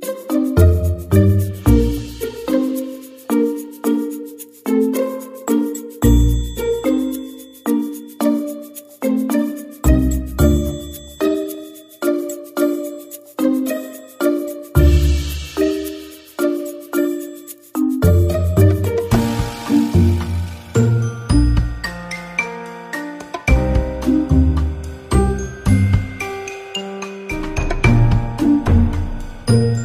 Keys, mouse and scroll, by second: 0.5 click, 1.3 click, 1.7 click, 2.1 middle click, 5.2 click, 6.2 ctrl+click, 7.1 ctrl+click, 7.8 shift+click, 8.3 click, 9.3 click, 10.8 shift+click, 13.4 shift+click, 21.3 shift+click, 22.3 click, 24.6 middle click, 26.2 click, 28.4 click, 29.3 click.